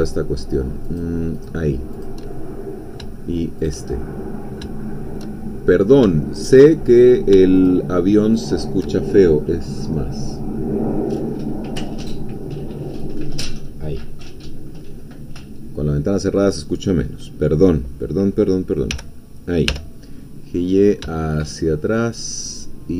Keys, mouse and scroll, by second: 1.0 shift+click, 2.0 shift+click, 2.3 shift+middle click, 3.6 shift+click, 4.2 middle click, 4.8 shift+middle click, 5.4-5.8 shift+scroll up 2, 6.2-7.2 shift+middle drag, 7.7 shift+click, 18.9 g, 19.7 y.